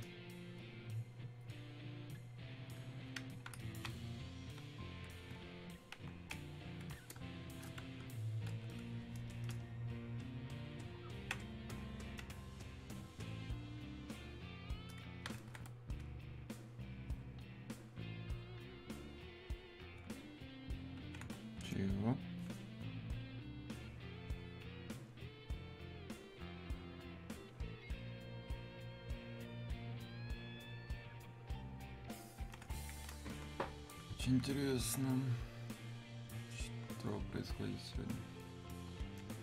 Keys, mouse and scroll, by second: 14.2-17.4 drag, 18.9-23.4 drag, 23.8-27.7 drag, 29.2-39.3 drag, 39.3-39.4 drag.